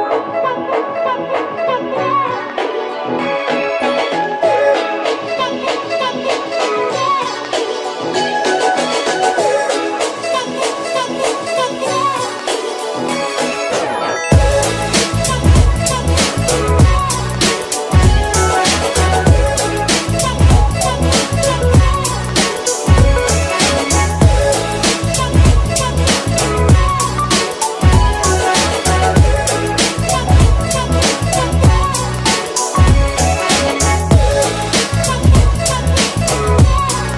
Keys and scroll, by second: 18.8 9, 20.4 0.